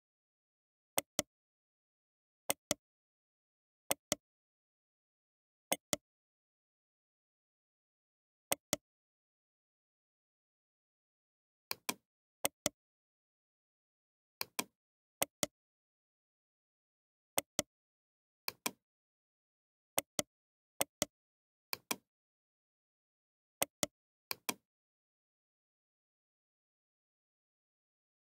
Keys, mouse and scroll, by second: 0.4 g, 1.6-3.4 middle drag, 1.6 g, 3.4 g, 5.7 click, 6.6-9.0 right drag, 9.0 Tab, 10.4 z, 11.4 c, 12.5-14.7 right drag, 13.2 ctrl+l, 14.2 c, 15.3-17.9 right drag, 15.9 ctrl+l, 16.3 g, 18.0 p, 19.0 middle click, 19.4 Tab, 19.6 click, 20.0-22.4 right drag, 22.4-23.5 drag, 23.6-25.3 right drag, 25.3 click, 26.7 Left.